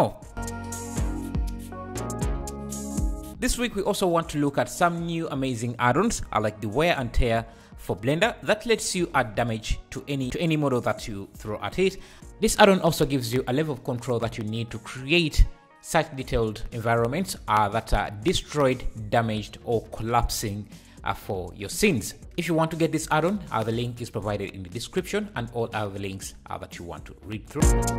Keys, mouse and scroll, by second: 1.7 click, 1.7 middle click, 1.9 click, 2.3-3.4 middle drag, 2.3 right click, 2.6 click, 3.2 k, 3.7 click, 3.7 middle click, 3.9 k, 4.0 middle click, 6.8-11.2 right drag, 7.2 click, 7.5 F9, 8.1 click, 8.5-9.6 drag, 8.8-11.2 middle drag, 10.1-11.2 drag, 11.6 middle click, 11.6-15.8 right drag, 11.7 F9, 12.3 F9, 13.1 click, 13.1 middle click, 13.7 F9, 14.1 click, 14.1 middle click, 14.9 F9, 15.1-17.8 drag, 15.1 middle click, 16.8 middle click, 16.8 right click, 17.4 KP_0, 18.3 F9, 18.3 middle click, 18.5 click, 19.5 click, 19.9-21.0 middle drag, 19.9 right click, 20.2 click, 20.7 k, 21.2 click, 21.4 middle click, 21.4 k, 22.2-23.4 drag.